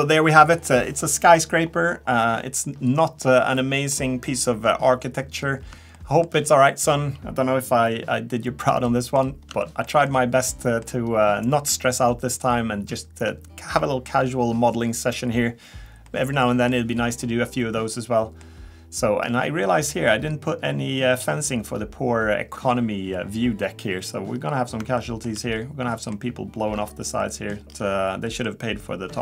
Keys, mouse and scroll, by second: 2.2 middle click, 3.4 middle click, 5.4-6.3 scroll up 4, 6.3 shift+middle click, 8.2 scroll down 1, 8.6 middle click, 9.7 shift+middle click, 10.7 middle click, 13.3 scroll down 1, 16.1 middle click, 17.8 middle click, 19.4-19.9 scroll up 4, 19.9 scroll up 1, 22.2 scroll down 2, 22.5 shift+middle click, 24.5 scroll up 2, 25.0 shift+middle click, 25.6 scroll down 2, 26.4 middle click, 26.7-27.1 scroll down 2, 27.3 middle click, 27.6 middle click, 27.6 scroll down 2, 27.9 scroll up 2, 28.3 middle click.